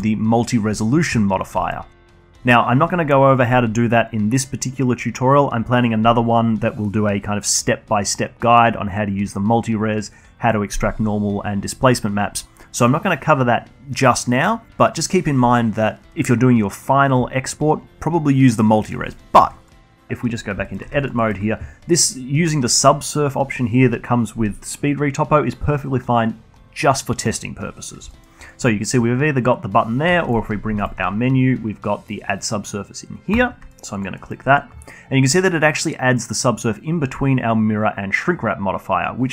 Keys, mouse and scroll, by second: 1.6-2.1 alt+middle drag, 2.1 alt+click, 19.1 click, 20.7 alt+middle click, 21.0 Tab, 21.8 alt+middle click, 22.1 alt+drag, 22.3-25.5 alt+middle drag, 29.2-29.5 alt+middle drag, 29.5-31.9 alt+drag, 31.9-34.8 shift+right drag, 34.8 alt+middle drag, 35.1 alt+drag, 35.3-38.3 alt+middle drag.